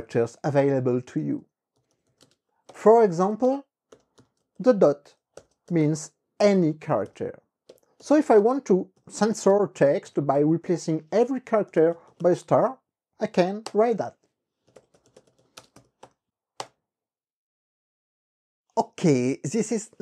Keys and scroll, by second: 0.0-5.5 typing, 2.8 KP_Subtract, 6.6 KP_Multiply, 7.8-12.8 typing, 9.6 shift+Tab, 10.1 Tab, 13.8 KP_Enter, 14.5-15.9 typing, 16.1 KP_Multiply, 16.7 KP_Enter.